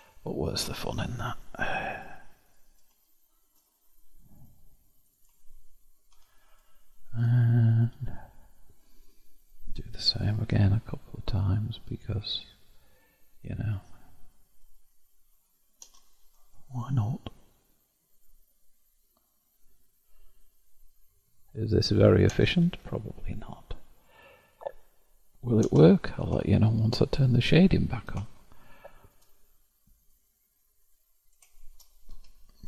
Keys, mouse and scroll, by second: 0.0-1.8 shift+middle drag, 1.8 click, 2.4 click, 3.6-5.0 middle drag, 5.0 shift+click, 6.1 0, 6.8-7.8 shift+middle drag, 7.8 KP_7, 9.0-10.4 middle drag, 10.4 k, 15.1-15.8 scroll down 1, 16.7 k, 22.6 k, 26.4-30.0 shift+middle drag, 30.0 click, 31.4 shift+click, 32.1 0.